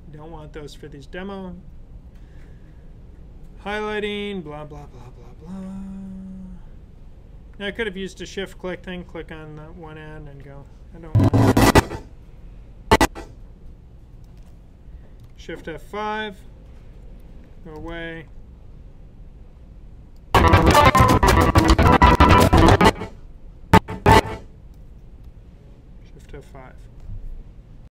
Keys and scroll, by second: 16.8 F5, 26.3 F5.